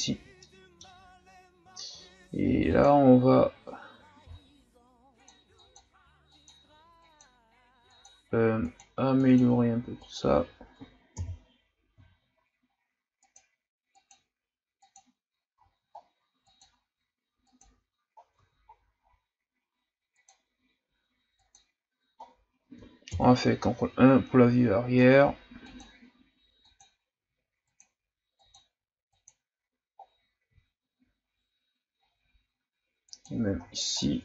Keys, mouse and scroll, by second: 1.0-2.7 shift+scroll up 2, 2.7-4.2 drag, 4.2 shift+f, 5.6-11.2 drag, 11.2 KP_1, 12.1-13.2 shift+scroll up 5, 13.2-15.7 drag, 15.7-16.5 scroll down 7, 16.5-18.2 drag, 18.2-19.1 scroll down 5, 19.1-19.9 scroll up 2, 19.9 scroll up 1, 20.2-22.3 drag, 22.3-23.1 scroll down 1, 23.1 ctrl+KP_1, 24.1-24.7 scroll up 6, 24.7-25.2 ctrl+scroll down 9, 25.6-30.0 drag, 30.0-30.5 scroll down 2, 30.7-32.0 shift+scroll down 5, 32.0-32.3 ctrl+scroll down 4, 32.3-33.1 scroll up 3, 33.1 click, 33.6-34.2 ctrl+scroll down 9.